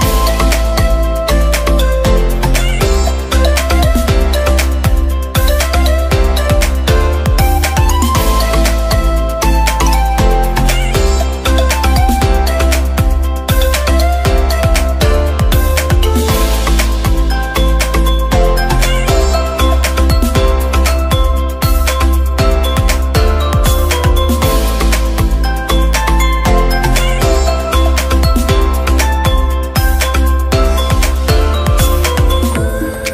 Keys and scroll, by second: 19.1 ctrl+d, 21.2 ctrl+t.